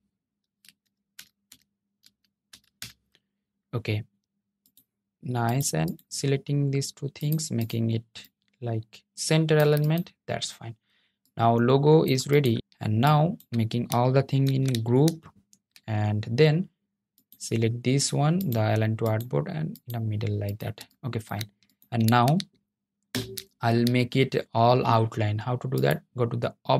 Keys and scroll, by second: 13.5 super+g, 22.2 super+0.